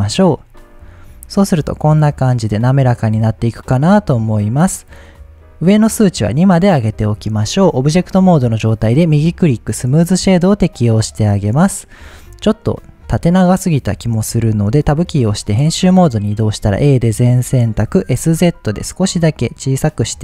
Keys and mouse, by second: 0.7-1.2 middle drag, 2.0 middle click, 3.3 click, 3.9 click, 5.4 click, 7.2-7.5 middle drag, 8.9 click, 10.1 middle drag, 11.9-12.6 middle drag, 13.2-14.1 middle drag, 14.2 click, 14.9 Tab, 16.7 a, 17.7 s, 18.1 z, 20.1 click.